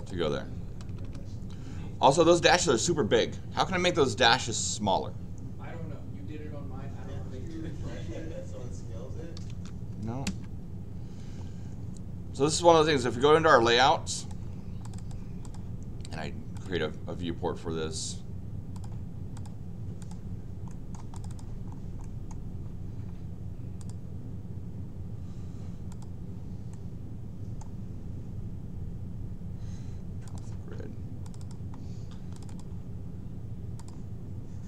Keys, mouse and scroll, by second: 0.0 click, 0.9 Escape, 1.0 Escape, 9.2-10.0 typing, 14.2 click, 14.8 click, 14.9 click, 15.4 click, 16.5 click, 18.7 click, 19.3 click, 20.0 click, 20.7 middle click, 21.1 click, 21.3 click, 21.7-22.3 scroll down 4, 22.6 scroll down 2, 23.8 click, 25.9 click, 26.7 middle click, 30.2 click, 31.2 click, 31.4 click, 31.8 middle click, 31.8 scroll up 2, 32.3 click, 32.5 click.